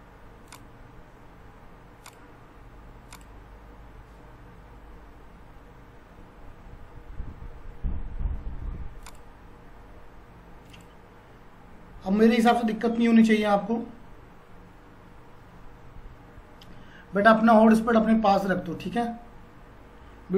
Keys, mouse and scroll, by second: 1.5 scroll up 1, 2.2 click, 9.0 click.